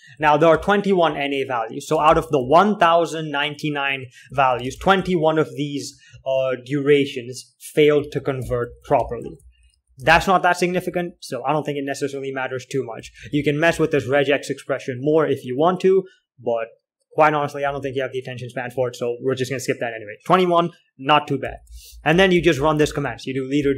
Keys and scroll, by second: 0.0-3.0 typing, 2.6 ctrl+h, 4.8-11.2 typing, 5.1 ctrl+l, 13.2-16.0 typing, 18.2 typing, 22.0-22.4 typing.